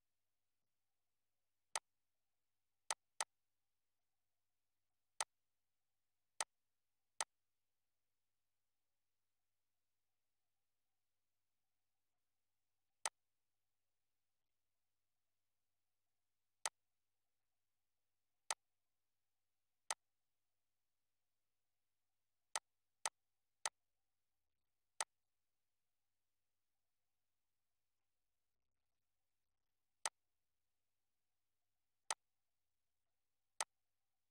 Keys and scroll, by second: 25.9 Down.